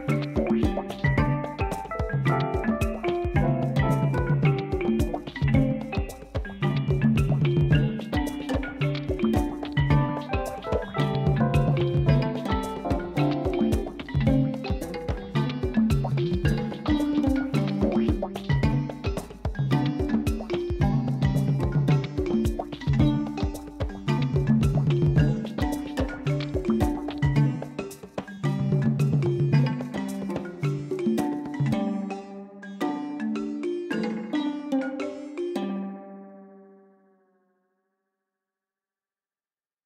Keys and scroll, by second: 1.7 Tab, 4.7 u, 7.9 f, 8.6 r, 9.1 Return, 17.7 ctrl+shift+t, 28.5 alt+a, 31.5 ctrl+z, 32.2 u, 34.6 Tab, 36.8 Tab.